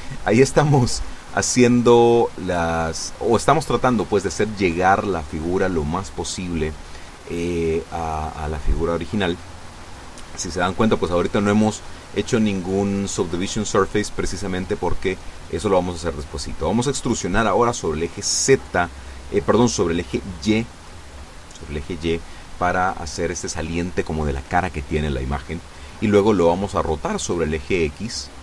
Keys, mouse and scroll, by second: 10.3 a, 11.3 b, 11.9-13.1 drag, 15.2 e, 25.4 click, 27.2 r.